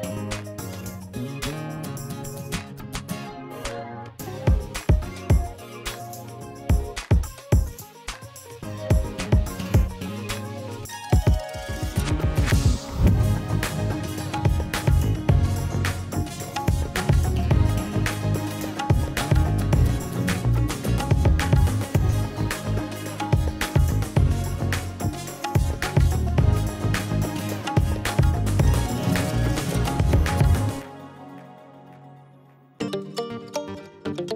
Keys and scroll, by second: 1.0 space, 2.2 shift+space, 5.1 F9, 6.5 space, 9.7 b, 11.3 space, 17.3 space, 18.5 space, 20.6 space, 24.8 space, 28.7 space, 30.4 space.